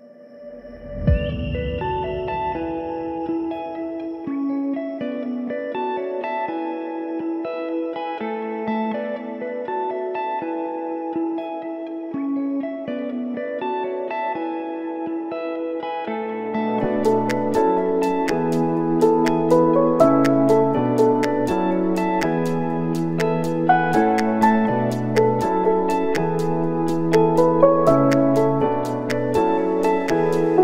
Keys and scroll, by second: 14.2 ctrl+v, 15.0 ctrl+v, 16.7 ctrl+c, 16.9 ctrl+v, 17.6 ctrl+c, 17.8 ctrl+v, 19.5 ctrl+c, 20.4 ctrl+v, 21.3 ctrl+c, 21.7 ctrl+s, 27.2 space, 29.3 F9, 29.8 space.